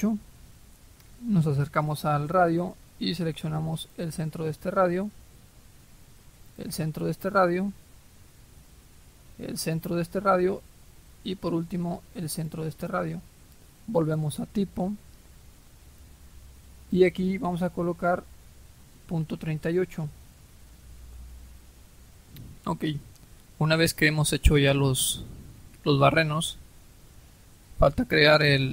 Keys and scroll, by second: 20.3-21.0 typing.